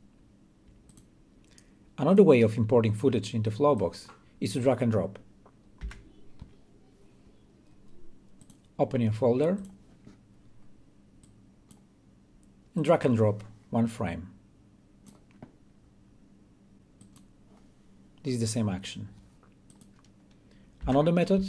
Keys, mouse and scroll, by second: 1.7-5.5 drag, 6.6 Delete, 7.7 Delete, 9.1 click, 10.6-12.6 drag, 20.5 click.